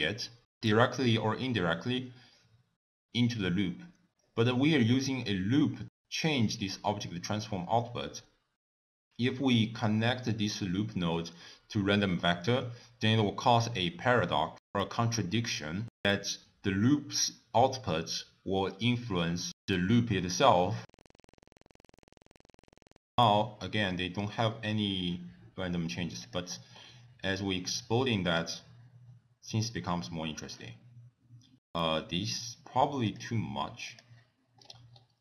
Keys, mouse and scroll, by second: 1.9 scroll up 1, 4.3 middle click, 6.0 middle click, 10.0 middle click, 10.5 scroll down 2, 21.2 middle click, 21.3 scroll up 5, 21.4 middle click, 22.0 click, 23.0 click, 23.9 middle click, 24.4 scroll up 3, 26.3 click, 26.8-27.3 scroll down 4, 27.5 middle click, 28.3-28.8 scroll down 3, 33.1 click, 33.9 click, 34.6-35.2 scroll up 7.